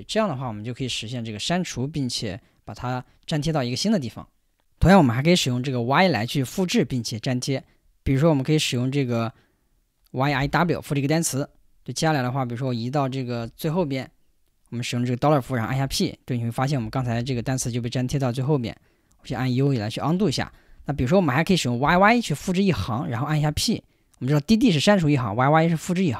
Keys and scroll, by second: 0.0-0.7 typing, 10.0-11.0 typing, 13.6 shift+4, 15.7 p, 16.8-17.5 typing, 19.2 u, 20.5-21.9 typing, 23.3 p.